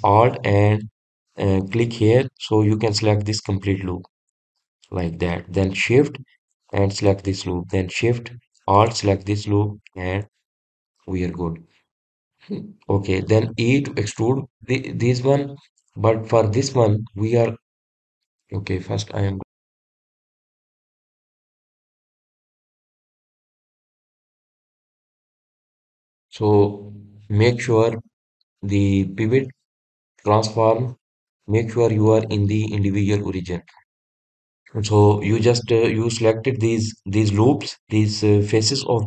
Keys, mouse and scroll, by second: 5.9 alt+click, 8.4 alt+shift+click, 10.2 alt+shift+click, 28.4-31.6 drag, 35.3-38.3 middle drag.